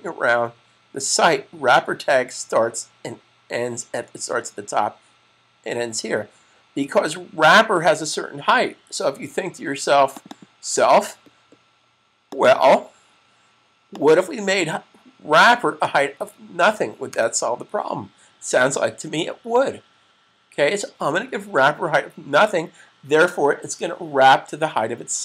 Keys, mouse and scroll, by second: 10.2 double click, 12.1 click.